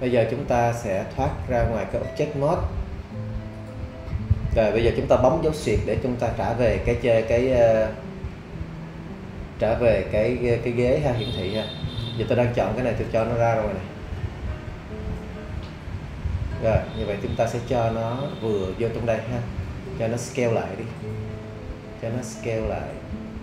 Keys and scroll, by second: 5.6 /.